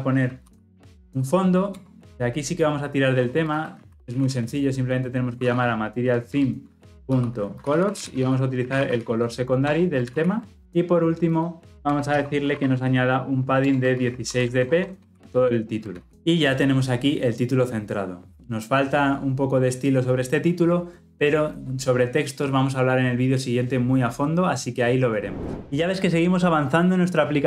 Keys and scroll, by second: 1.7 Return, 6.3 Return, 10.1 ctrl+alt+o, 13.6 Return, 15.9 Return, 16.0 ctrl+alt+o.